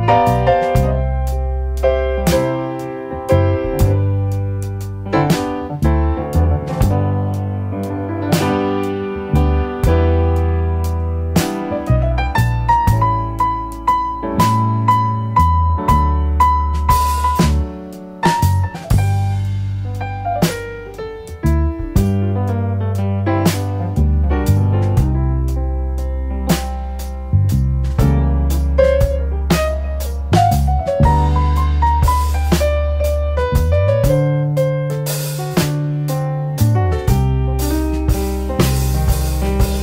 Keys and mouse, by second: 3.9-4.3 drag, 4.8-5.4 drag, 5.7 shift+click, 7.1 shift+click, 8.1 click, 9.2 shift+click, 10.6 shift+click, 11.8-12.9 drag, 14.0 middle click, 14.2 click, 15.3-17.0 drag, 17.9 click, 18.4 click, 18.7 click, 18.9 click, 19.2 click, 19.5-20.7 drag, 21.2 middle click, 22.0-23.1 drag, 25.5 drag, 26.2 click, 26.8-28.7 drag, 27.8 KP_0, 30.4-32.1 drag, 31.1 KP_0, 33.9 click, 35.2 shift+click, 35.9-36.4 drag, 36.8 shift+click, 37.5 click, 38.2 ctrl+t, 39.6 click.